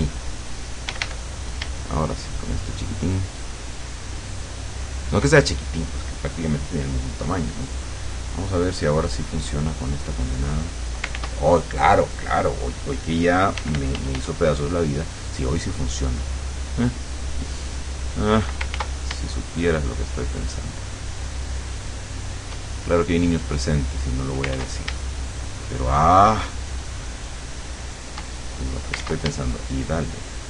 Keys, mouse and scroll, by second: 0.9 d, 2.2-3.3 shift+drag, 3.6 shift+click, 4.7 shift+click, 7.2 right click, 7.8 click, 8.2 click, 9.2 click, 10.3 click, 11.2 ctrl+z, 13.6 f, 17.6 click, 18.8 ctrl+z, 19.4-22.6 shift+drag, 23.0 shift+click, 24.6 ctrl+z, 25.4-28.5 shift+drag, 29.1 ctrl+z, 29.6-30.4 ctrl+shift+drag.